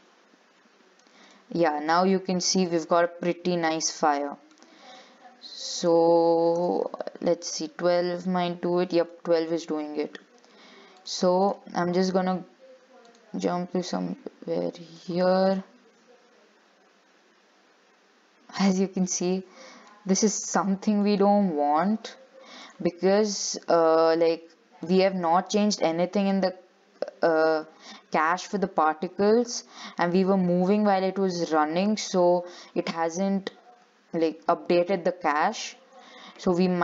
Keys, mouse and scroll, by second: 0.6-1.1 scroll down 1, 1.5-4.6 middle drag, 5.9-9.1 drag, 9.4 shift+middle click, 10.1 ctrl+s, 11.2-18.9 drag, 19.3 scroll down 6, 19.5 shift+middle click, 20.3-21.2 scroll up 4, 21.2-22.8 shift+middle drag, 22.8-25.1 drag, 26.5-29.6 drag, 36.1 click.